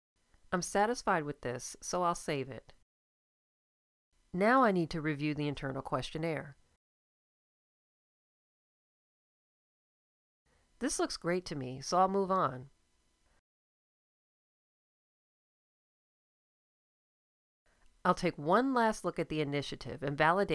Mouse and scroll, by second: 7.1-19.9 drag.